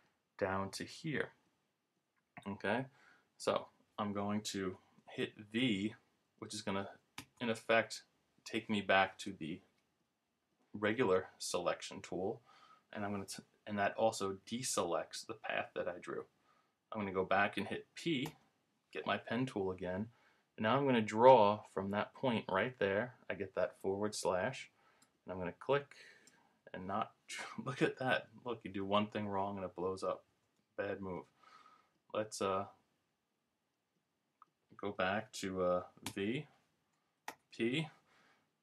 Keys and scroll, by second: 7.2 v, 18.3 p, 30.3 super+z, 36.1 v, 36.7 v, 37.3 p.